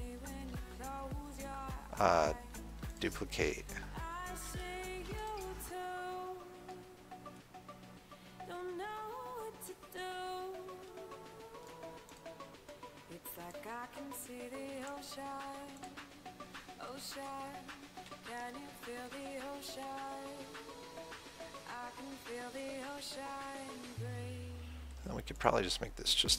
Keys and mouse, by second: 3.3-4.9 drag, 10.0-12.0 drag, 12.5-13.9 drag, 14.2 ctrl+z, 17.5 KP_7, 18.8 KP_1, 19.4 KP_3, 25.7-26.3 right drag.